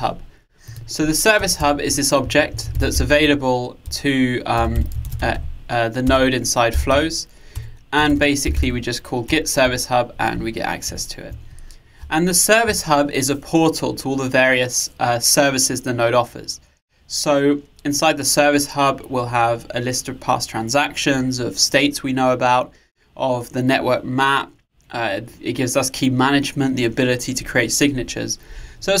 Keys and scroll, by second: 7.6 Return, 10.9 Return.